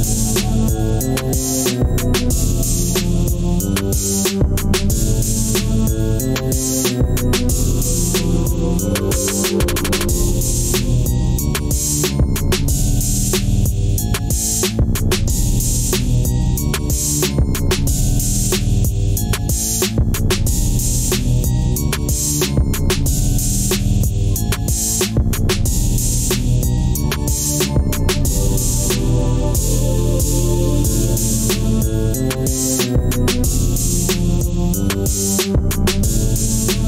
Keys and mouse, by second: 4.9 ctrl+r, 9.6-10.4 middle drag, 11.5 Tab, 12.1 Tab, 13.8 3, 14.1 click, 18.8-19.9 right drag, 21.9-24.0 middle drag, 24.4 middle click, 25.0 Tab, 26.1 Tab, 26.8 middle click, 28.3 ctrl+r, 31.0 Tab, 31.6 Tab, 33.6 3, 34.0 click, 35.0-35.7 drag.